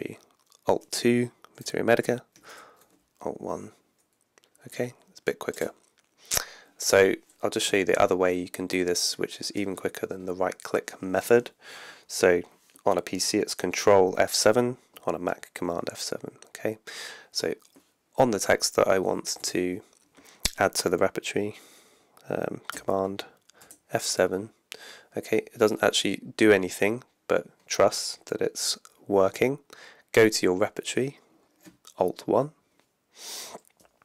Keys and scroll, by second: 0.7 alt+2, 2.5 alt+1, 7.7 Down, 19.1 Down, 19.4 Up, 23.6 super+F7, 30.9 alt+1.